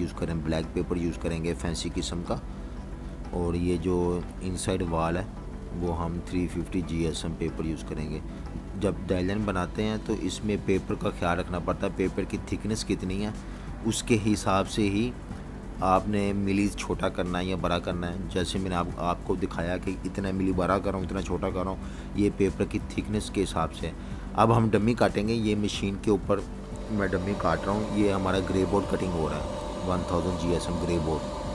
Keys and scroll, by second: 0.5 v, 0.7 space, 1.5 z, 1.6 z, 2.7 v, 2.9 space, 6.0 super+z, 8.0 -, 8.2 space, 11.9-14.4 typing, 17.6 space.